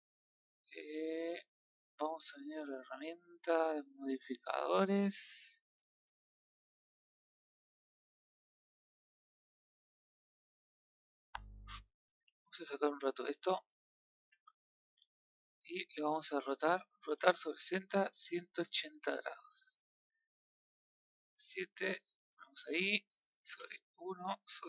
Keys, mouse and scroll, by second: 3.6 click, 12.1 click, 13.8 shift+click, 14.5 middle click, 14.8 r, 19.3-20.9 middle drag, 20.9 KP_7, 22.0 g, 23.5 KP_1.